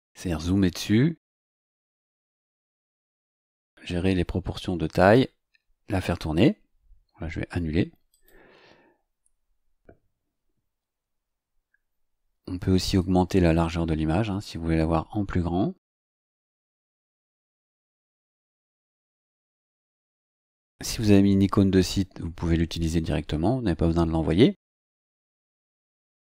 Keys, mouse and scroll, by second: 8.1 click, 11.3 scroll down 2, 12.9-18.0 drag, 19.1-20.0 scroll down 3, 26.1 click.